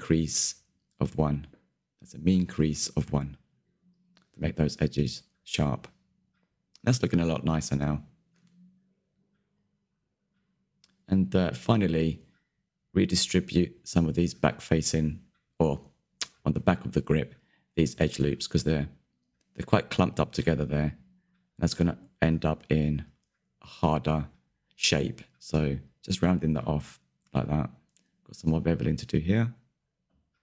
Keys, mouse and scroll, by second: 0.1-0.5 scroll down 6, 0.6 middle click, 0.8 scroll up 2, 1.1 alt+Left, 1.4 ctrl+Delete, 1.9 alt+Left, 2.2 ctrl+b, 3.7 Tab, 3.9 scroll down 2, 4.2 click, 4.5 shift+middle click, 4.6 scroll down 1, 4.7 middle click, 6.2 click, 6.3 Tab, 6.4 middle click, 7.2 middle click, 7.9 scroll up 2, 8.0-10.1 shift+middle drag, 10.1 click, 10.3 middle click, 11.2 scroll up 4, 11.4 shift+middle click, 11.6 click, 11.7 scroll down 1, 11.8 shift+middle click, 12.4 scroll up 2, 12.7-14.4 shift+middle drag, 14.4 ctrl+click, 14.8 scroll down 1, 14.9 shift+middle click, 15.4 ctrl+click, 15.6 shift+middle click, 16.0 shift+click, 16.1 shift+click, 16.7-18.3 middle drag, 18.3 shift+click, 18.4 shift+click, 18.6 shift+middle click, 18.9 scroll up 3, 19.1-21.0 middle drag, 21.0 scroll down 1, 21.0 shift+middle click, 21.5 scroll up 1, 21.7 shift+click, 21.8 middle click, 22.2 ctrl+click, 22.6 shift+middle click, 23.0 ctrl+click, 23.2 scroll down 3, 23.3 middle click, 23.6 s, 24.8 scroll down 1, 24.9 Tab, 25.0 click, 25.1 middle click, 25.9-26.4 scroll up 4, 26.0 shift+middle click, 26.4 click, 26.9 middle click, 27.8 click, 28.1 Tab, 28.2 middle click, 28.6 KP_3, 29.0 z, 29.1 scroll up 2, 29.3 shift+middle click, 29.8 alt+click.